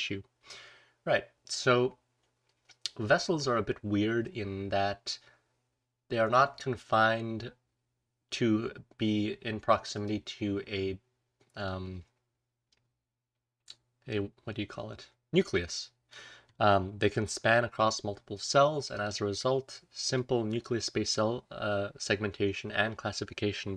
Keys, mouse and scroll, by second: 11.6-12.6 drag, 15.4-16.0 drag, 16.4-17.3 scroll up 1, 17.3-19.3 scroll up 1, 18.4-19.0 drag, 19.3-23.7 scroll down 1, 20.1-20.5 drag.